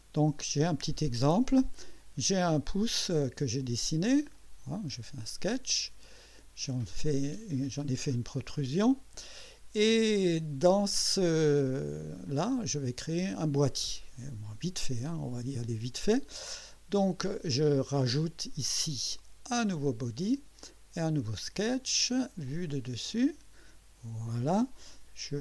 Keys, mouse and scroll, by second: 0.2 click, 4.2 click, 6.0 click, 7.8 scroll up 1, 8.3 click, 11.9-12.4 drag, 12.5 scroll down 1, 13.1-13.7 drag, 19.5 click, 21.3 click, 22.5 click, 23.1 click.